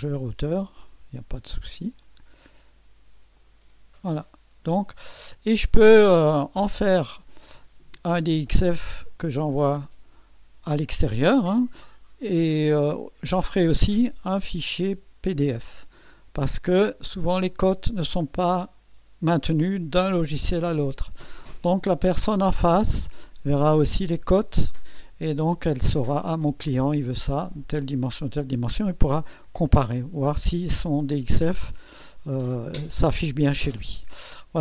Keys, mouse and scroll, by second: 0.8 click, 2.0 click, 3.4 click, 4.1 click, 4.8-5.2 scroll down 2.